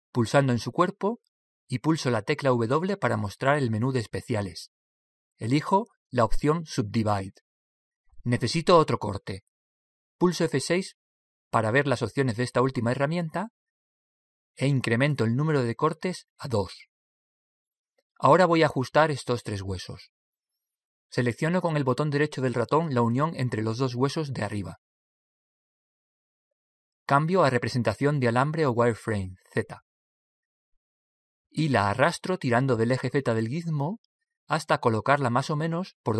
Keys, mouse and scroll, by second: 0.4 right click, 2.9 w, 11.5 F6, 25.5 right click, 28.6 right click, 29.1 z, 30.4 z, 33.3 click.